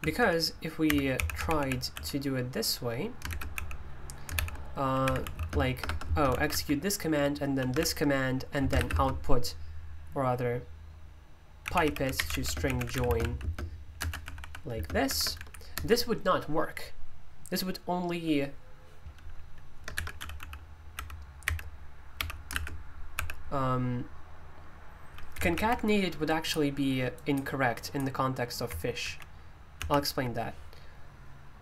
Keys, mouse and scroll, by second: 0.0-9.1 typing, 11.6-16.2 typing, 21.0-23.1 typing, 26.2-31.6 drag.